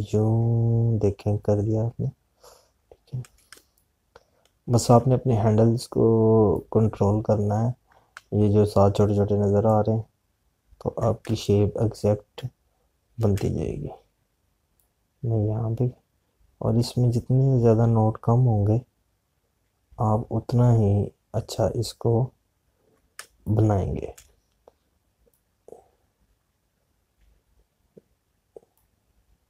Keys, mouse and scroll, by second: 5.5 space, 8.0-12.2 drag, 12.2 space, 16.9-25.0 drag, 25.0 space, 27.2 click.